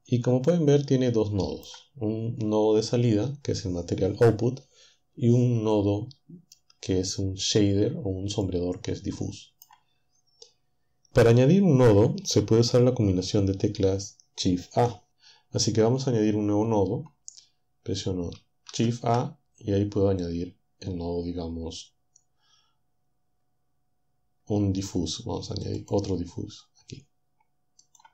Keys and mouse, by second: 18.7 shift+a, 25.8 click, 27.8 click.